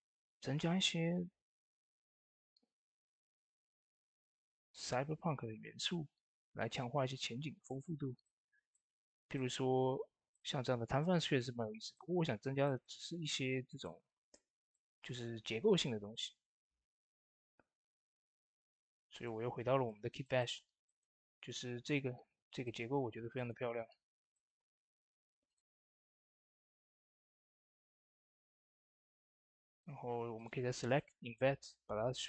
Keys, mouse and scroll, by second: 2.1 click, 7.4 click, 7.4 click, 8.1 middle click, 8.9 scroll up 1, 9.2 middle click, 9.5 scroll up 1, 10.2 middle click, 11.8 shift+middle click, 12.2 scroll down 2, 12.5 shift+middle click, 13.1 scroll up 1, 13.7 shift+middle click, 14.1 click, 15.3 middle click, 15.6 scroll down 1, 16.4 shift+d, 17.4-17.9 scroll down 2, 17.9 shift+space, 18.5 shift+space, 19.0-20.2 drag, 20.2 shift+middle click, 20.5-21.1 scroll up 4, 20.7 middle click, 21.1 Tab, 21.4 shift+middle click, 22.5-23.8 drag, 23.8-24.5 scroll up 3, 24.2 shift+middle click, 25.3-28.6 drag, 28.6-30.2 middle drag, 30.2 click.